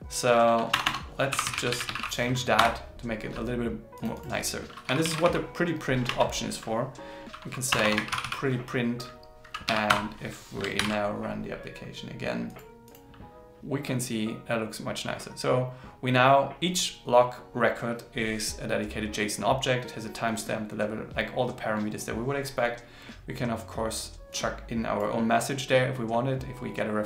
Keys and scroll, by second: 6.0 super+s, 10.8 ctrl+shift+r.